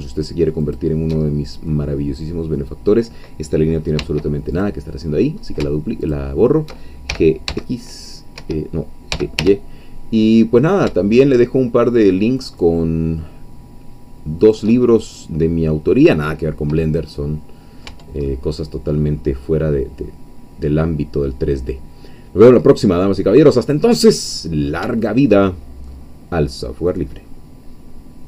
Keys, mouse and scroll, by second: 0.6 alt+shift+click, 1.3 alt+shift+scroll down 2, 1.7-2.7 middle drag, 4.0 x, 4.5 click, 5.0-5.6 scroll up 1, 6.0 alt+shift+click, 7.1 alt+shift+g, 7.5 alt+shift+x, 8.4 Escape, 9.1 g, 9.4 y, 14.4 shift+click, 14.9-15.3 shift+scroll down 2, 16.6 scroll down 2, 17.1 middle click, 18.0 Tab, 18.3-23.5 drag, 23.8-24.6 scroll up 2, 24.6 scroll down 3, 25.0-28.2 shift+drag.